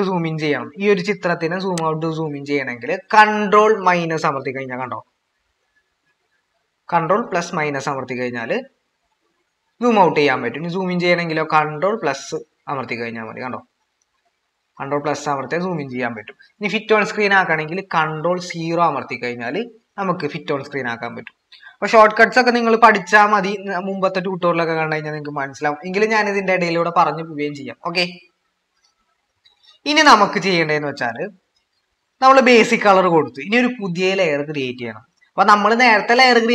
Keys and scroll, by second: 0.0-0.8 typing, 3.9 ctrl+-, 10.6 ctrl++, 13.6 ctrl+-, 14.6 ctrl++, 18.3 ctrl+0.